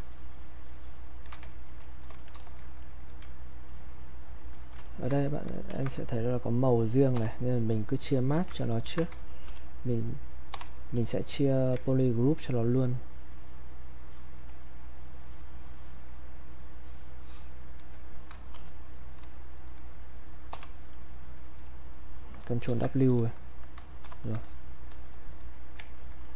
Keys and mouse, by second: 1.6 ctrl+right click, 2.0 click, 2.3 alt+click, 2.8 ctrl+right click, 3.7 click, 4.5 alt+click, 4.8 ctrl+right click, 5.2 click, 5.7 ctrl+shift+1, 6.1-7.6 drag, 9.5 shift+g, 11.3 click, 13.2-18.5 ctrl+drag, 18.5 shift+f, 21.1-22.6 drag, 22.6 ctrl+w, 24.0 shift+f, 24.5-25.8 drag, 25.8 ctrl+right click, 26.2 click.